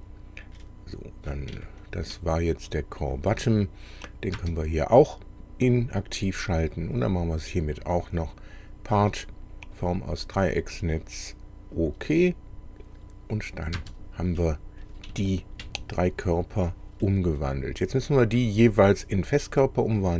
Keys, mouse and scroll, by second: 0.6 middle click, 1.6 shift+middle click, 2.5 shift+middle click, 4.4 space, 6.4 click, 8.2 click, 9.8 click, 11.8 click, 13.8 space, 14.4 middle click, 15.2 shift+middle click, 16.1 shift+middle click, 18.3 click.